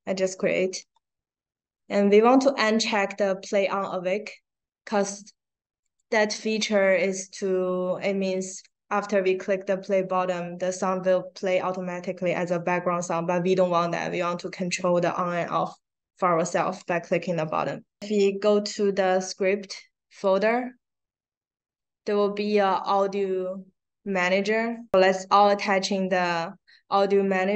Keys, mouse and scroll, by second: 5.7 click, 20.1 click, 20.3 click, 23.4 click, 24.9-27.5 drag.